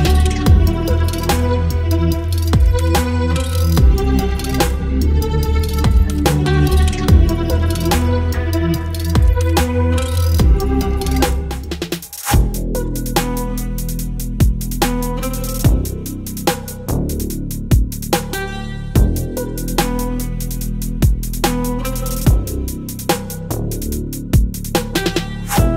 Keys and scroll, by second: 7.5 ctrl+m.